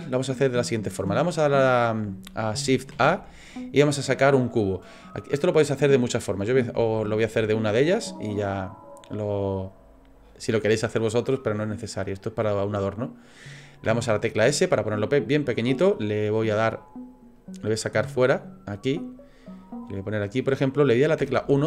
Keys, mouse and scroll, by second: 2.9 shift+a, 7.5 shift+middle click, 8.0-8.5 scroll up 3, 8.3 middle click, 17.3 click, 21.2 KP_1.